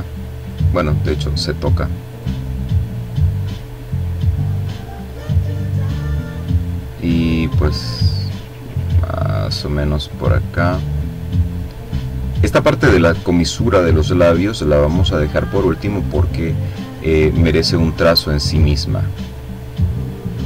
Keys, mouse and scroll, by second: 1.0 click, 2.0 click, 3.5 click, 4.7 click, 5.5 click, 7.6 click, 8.3 click, 9.4 click, 10.3 click, 11.3-12.3 drag, 12.4-13.6 drag, 14.1 click, 14.9 click, 15.5 click, 18.9-19.9 drag, 20.0 click.